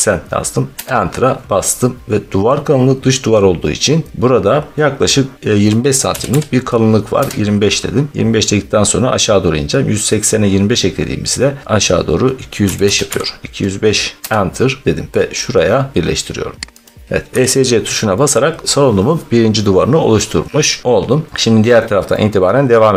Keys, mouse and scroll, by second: 0.8 Return, 4.1 scroll, 4.7 middle click, 4.7 scroll, 5.4-6.0 scroll down 2, 6.0 typing, 7.0 Return, 9.4 typing, 12.5-13.0 typing, 14.2 Return, 16.8 click, 17.2 Escape, 18.6-22.9 middle click, 20.4 scroll down 1, 20.8-21.6 scroll.